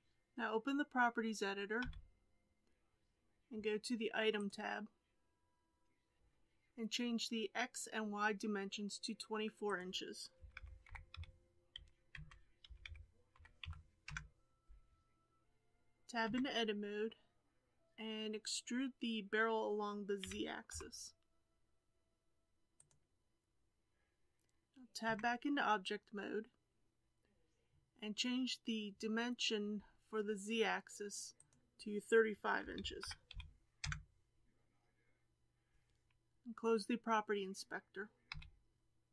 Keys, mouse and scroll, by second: 1.7 n, 4.3 click, 9.6-12.7 drag, 15.4 KP_1, 16.2 Tab, 20.2 e, 25.0 Tab, 31.3-34.5 drag, 38.2 n.